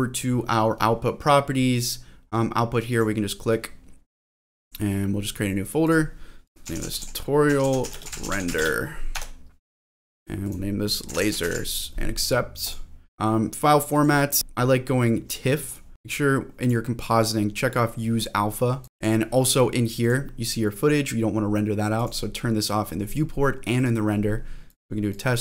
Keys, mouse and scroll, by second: 2.1 scroll down 1, 2.9 click, 13.1-13.9 scroll down 2, 13.9-15.6 drag, 18.9 click, 20.0 click, 22.0 click, 23.8 click, 24.7 click.